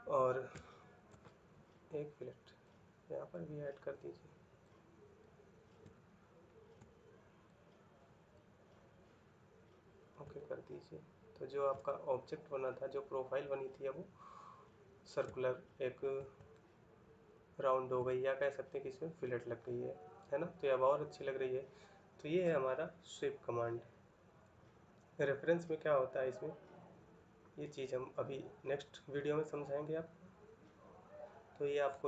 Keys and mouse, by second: 5.7 shift+middle click, 10.1 ctrl+middle click, 11.6 middle click, 15.7 shift+middle click, 16.2 ctrl+middle click, 19.3 middle click.